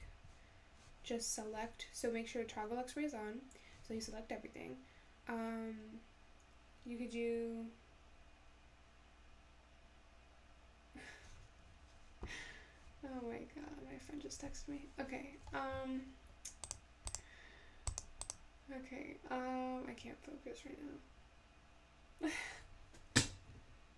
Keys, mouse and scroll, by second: 0.0 ctrl+z, 16.7 click, 17.1 click, 17.9 click, 18.3 click.